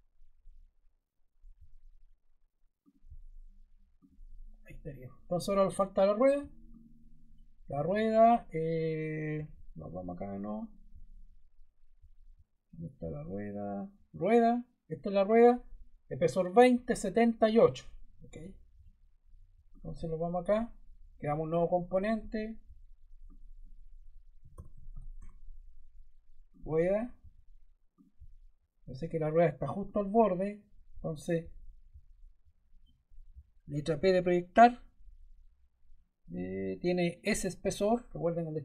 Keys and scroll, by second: 24.0-25.5 typing, 33.8 p.